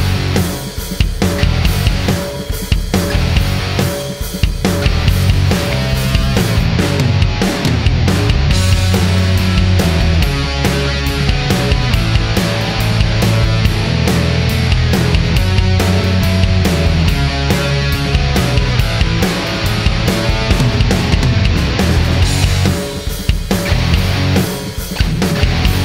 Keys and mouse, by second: 0.6-3.1 drag, 3.8 space, 14.6 space, 15.7-17.0 drag, 19.5-21.6 drag.